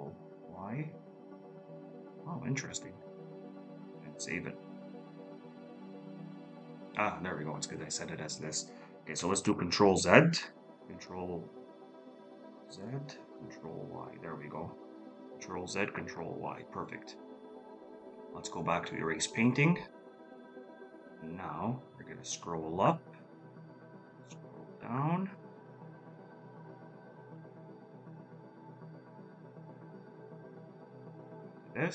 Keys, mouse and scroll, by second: 2.1-2.4 scroll down 1, 3.2 scroll up 1, 5.4 ctrl+y, 7.0 space, 7.6 ctrl+y, 8.7 ctrl+z, 12.8 ctrl+y, 13.7 space, 14.8 ctrl+z, 15.2 ctrl+y, 16.0 ctrl+y, 20.5-21.2 scroll up 1, 23.4 scroll down 1, 24.3 scroll up 1, 26.7-27.1 scroll up 1.